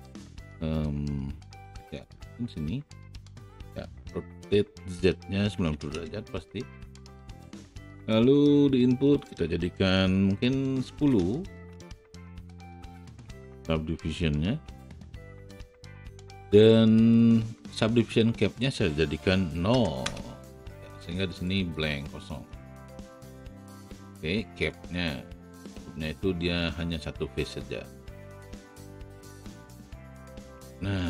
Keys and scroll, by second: 5.5 KP_9, 5.7 KP_0, 5.8 Return, 10.9 KP_1, 11.0 KP_0, 11.6 Return, 19.9 Return, 28.4 alt+w.